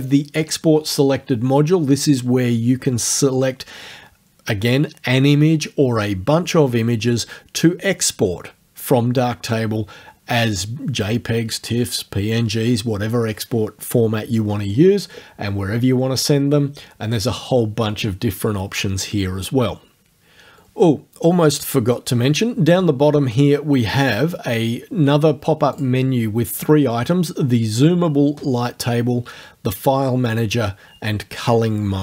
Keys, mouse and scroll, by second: 25.8 click.